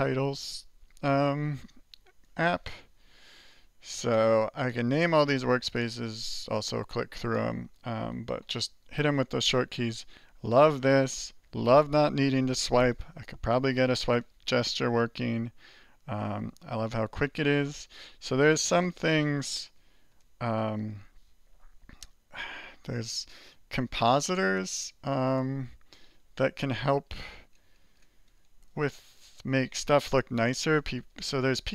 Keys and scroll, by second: 2.4 alt+2, 3.1 alt+1, 8.3 alt+3, 8.9 alt+5, 9.3 alt+4, 9.6 alt+2, 10.2 alt+1, 14.6 alt+2, 15.4 alt+3, 16.2 alt+2, 16.6 alt+1, 17.0 alt+2, 17.2 alt+3, 17.6 alt+4, 20.1 alt+Return, 23.9 alt+=, 28.7-31.2 typing.